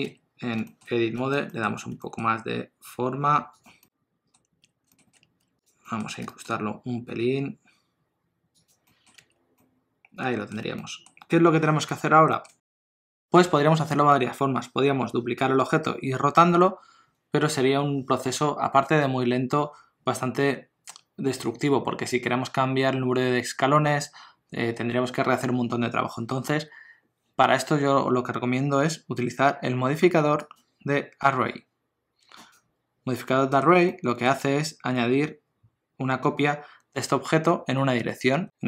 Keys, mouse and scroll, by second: 0.1 Tab, 0.7 shift+middle click, 1.2 a, 1.5 middle click, 2.0 s, 3.8 middle click, 4.6 Tab, 4.9 shift+middle click, 5.1 middle click, 5.2 Tab, 5.4 3, 5.6 click, 5.8 middle click, 6.2 g, 8.9 middle click, 9.2 Tab, 9.6 middle click, 10.6 alt+a, 10.8 middle click, 11.4-11.9 scroll up 1, 12.3 middle click, 12.7 shift+middle click, 13.0 middle click, 30.5 click, 33.3 middle click, 33.9 ctrl+middle click.